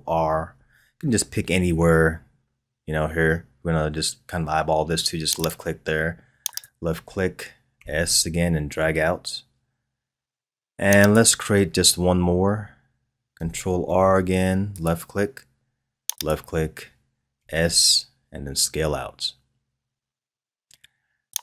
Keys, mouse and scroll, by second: 0.5 ctrl+r, 7.8 s, 13.8 ctrl+r, 17.3 s.